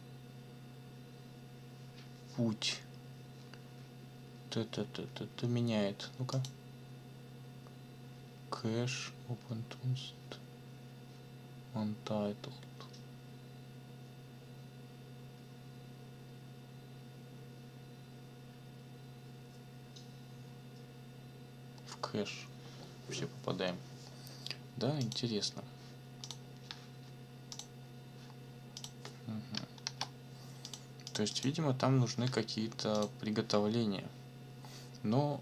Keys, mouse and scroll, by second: 6.3 click, 25.0 click, 26.2 click, 27.5 click, 28.8 click, 29.8 ctrl+l, 30.6 click, 31.1 click, 32.9 click.